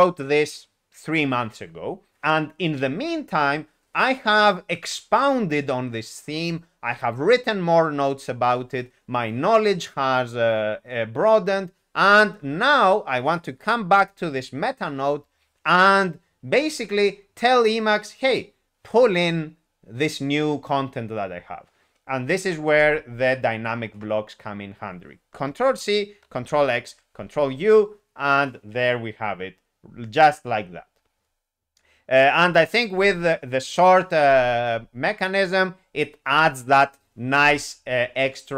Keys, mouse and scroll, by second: 26.9 ctrl+u.